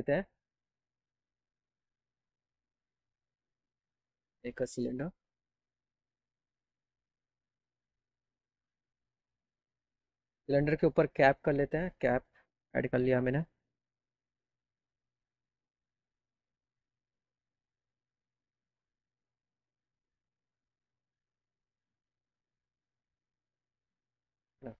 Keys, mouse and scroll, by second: 0.0 click, 0.6 click, 0.9 click, 1.4 click, 2.2 click, 3.6 click, 3.9 click, 5.4-6.4 drag, 8.3 right click, 11.8 click, 12.4 scroll down 1, 14.0 alt+w, 15.4 p.